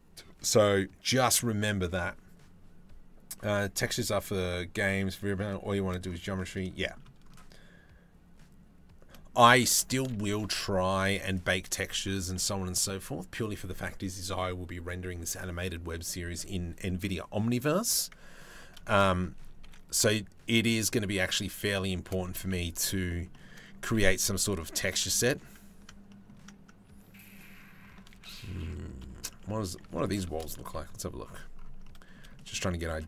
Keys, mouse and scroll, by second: 4.6 click, 5.3 shift+click, 6.0 click, 6.4 shift+click, 8.7 click, 9.1 Tab, 9.5 shift+click, 10.0 ctrl+r, 11.9 Tab, 18.1 Tab, 18.5 shift+click, 19.2 ctrl+r, 21.6 shift+click, 22.0 3, 22.5 click, 22.9 shift+click, 23.6 i, 24.8 click, 25.7 middle click, 27.8 ctrl+z, 28.6 middle click, 28.9 shift+middle click, 29.5 Tab, 29.6 click, 30.2 KP_Decimal.